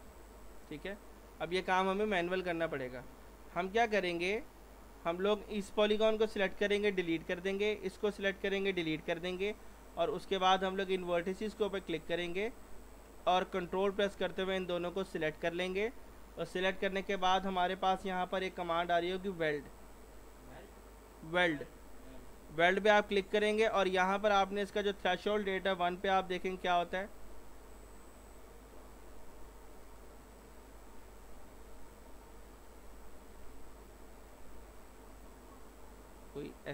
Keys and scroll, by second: 6.9 Delete, 8.8 Delete, 25.7 1, 26.2 Return, 36.6 ctrl+z.